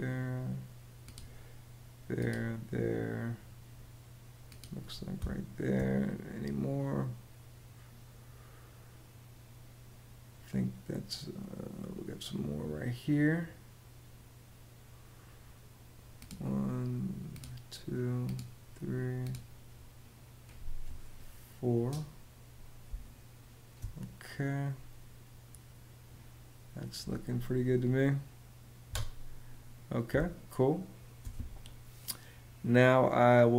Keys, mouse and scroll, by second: 5.0 space, 22.6 space, 28.6 Escape, 29.8 space.